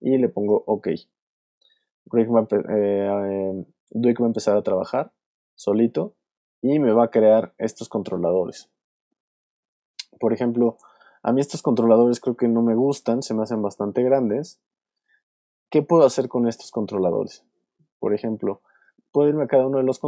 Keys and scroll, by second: 10.2 alt+space, 11.7 alt+space, 12.6 space, 17.9 shift+space, 18.7 space.